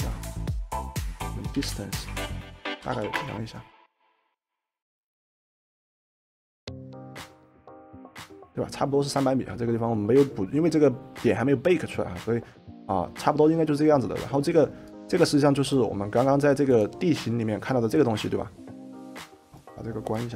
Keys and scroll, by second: 1.3-3.6 typing.